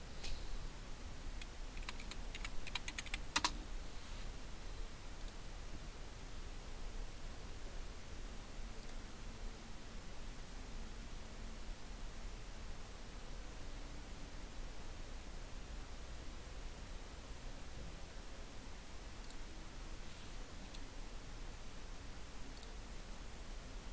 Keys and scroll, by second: 0.1 space, 1.8-3.4 typing.